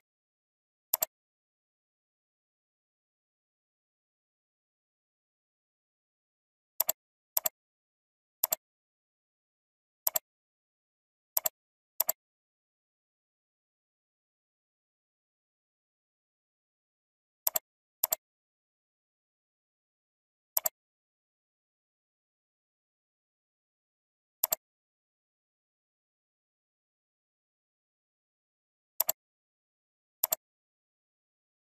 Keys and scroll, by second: 2.7 ctrl+alt+z.